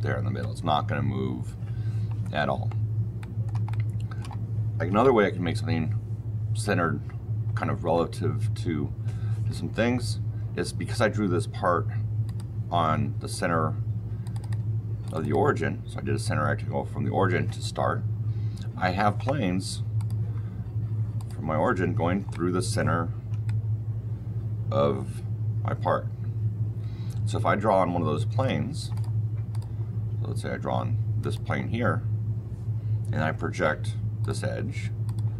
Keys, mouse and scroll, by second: 3.1 middle click, 4.0-5.6 shift+middle drag, 12.2 click, 14.3 click, 14.9 click, 15.1 click, 19.9 click, 21.1 click, 21.7-22.2 scroll down 4, 22.2 click, 22.2-22.6 scroll, 23.4 middle click, 23.8 shift+middle click, 23.8 shift+middle click, 25.8 shift+middle click, 28.8 click, 29.4 click, 31.1 click, 31.8-33.1 scroll down 4, 33.3 p, 34.1 click, 35.0 click.